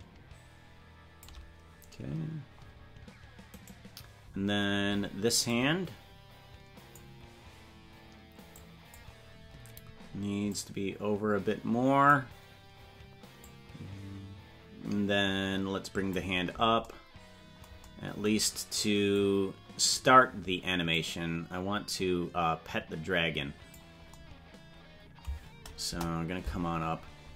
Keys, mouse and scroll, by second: 3.6 right click, 5.4-7.0 drag, 8.6 click, 10.4-12.1 drag, 13.5-16.3 drag, 19.2 click, 20.9-23.8 drag, 25.8 KP_0, 27.2-27.3 scroll down 3.